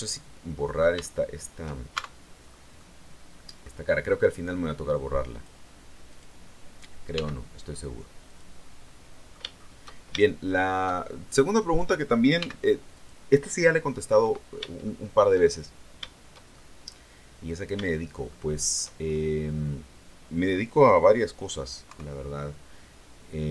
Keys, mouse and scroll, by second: 0.9 shift+middle click, 1.8 shift+Tab, 2.4 scroll down 2, 2.6-3.7 middle drag, 5.2 click, 6.0 right click, 7.0 x, 8.2 click, 8.5 middle click, 9.4-9.8 shift+scroll down 2, 10.1 shift+middle click, 11.5 right click, 12.3 x, 12.8 click, 13.5-14.6 middle drag, 14.7-16.1 shift+middle drag, 16.4-18.8 shift+middle drag, 18.9 shift+scroll up 2, 19.2-21.8 shift+middle drag, 21.8 KP_3.